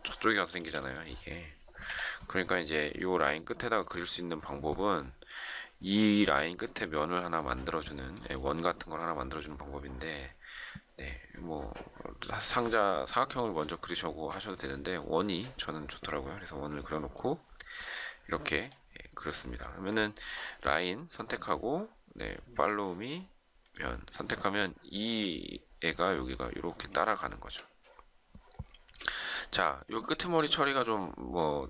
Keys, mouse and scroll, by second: 0.4 space, 1.8 Delete, 27.0 shift+middle click, 28.7 shift+middle click.